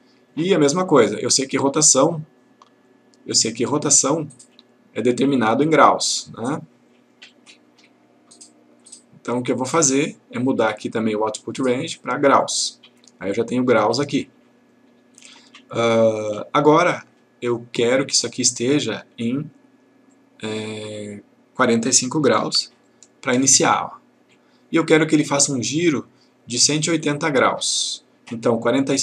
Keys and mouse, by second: 1.1-4.5 click, 7.4-8.9 click, 11.6 click, 12.5 click, 20.2 click, 22.5 typing, 22.9 click.